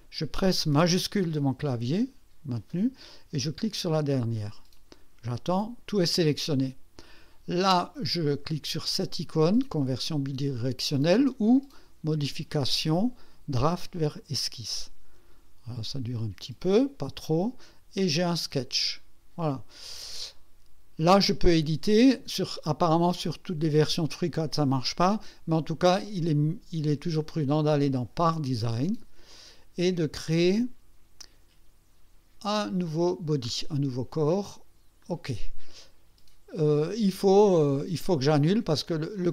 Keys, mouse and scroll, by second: 3.9 shift+click, 12.1 click, 14.2 click, 16.6-17.7 drag, 18.5 click, 27.2 click, 28.3 click, 32.8 click, 35.0 click, 39.1 click.